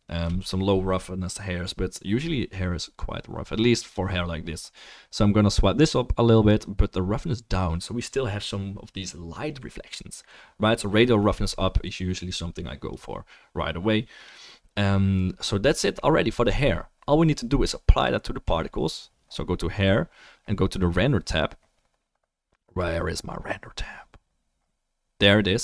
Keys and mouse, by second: 18.0-25.5 drag.